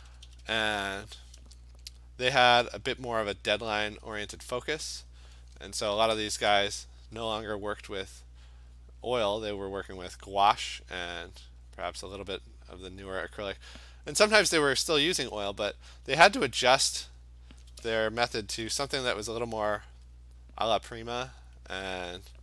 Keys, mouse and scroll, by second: 0.0 alt+click, 0.0 ], 0.1 ], 0.3 ], 0.4 ], 1.0 click, 2.7 alt+click, 3.2 alt+click, 3.6 click, 3.9 click, 4.1 click, 4.2 alt+click, 4.3 click, 4.5 click, 4.9 alt+click, 6.6 alt+click, 7.3 alt+click, 7.9 click, 8.3 click, 8.9 click, 9.2 click, 9.5 click, 9.9 click, 10.5 click, 10.9 click, 11.2 click, 11.4 click, 11.8 click, 12.0 click, 12.7 click, 12.9 click, 13.2 click, 13.4 click, 13.7 click, 15.1-16.2 alt+click, 16.0 click, 16.4 click, 16.8 click, 17.1 click, 17.2 click, 18.5 [, 18.7 [, 18.9 [, 19.1 [, 20.5 click, 20.7 click, 21.2 click.